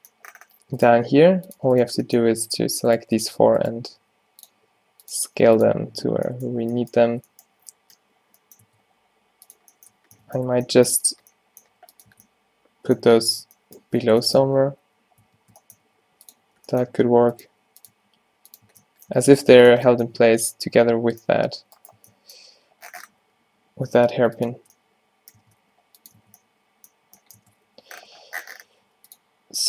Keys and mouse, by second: 0.9 click, 1.0 g, 4.1 e, 4.7 s, 5.2 g, 6.0 middle click, 7.2 Tab, 8.7 Tab, 8.9 g, 10.5 Tab, 11.2 Tab, 11.7 g, 12.2 Tab, 13.2 Tab, 14.7 Tab, 14.9 e, 15.3 Tab, 15.9-18.0 typing, 18.7 Tab, 19.2 Tab, 19.4 g, 19.8 Tab, 20.2 z, 21.4 g, 22.1 Tab, 23.3 g, 24.6 Tab, 25.5 Tab, 25.6 g, 26.2 Tab, 27.8 Tab, 27.9 z, 28.9 g.